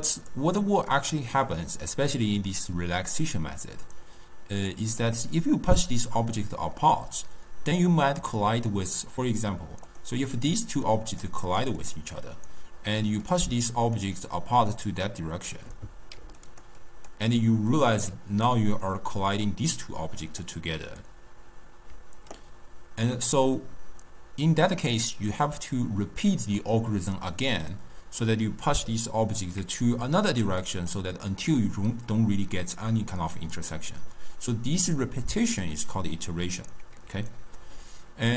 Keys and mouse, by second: 3.3 click, 5.9 click, 9.0-10.0 middle drag, 10.0 click, 10.5 click, 10.8 click, 11.2 click, 11.5 click, 11.9 click, 13.0 click, 13.3 click, 14.0 click, 16.3 d, 16.5 click, 16.8 d, 16.8 d, 16.9 click, 17.2-18.1 d, 19.3 d, 19.8-20.5 drag, 20.5-22.0 d, 28.9-30.2 d, 30.3 click, 30.5 d, 30.6 d, 30.8 click, 31.0-36.4 d.